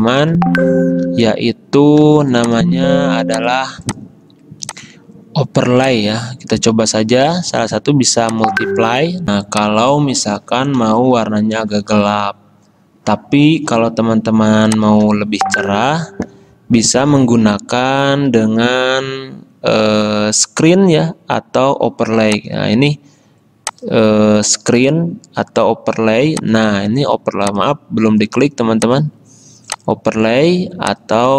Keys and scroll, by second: 0.3 ctrl+z, 1.2 v, 9.3 space.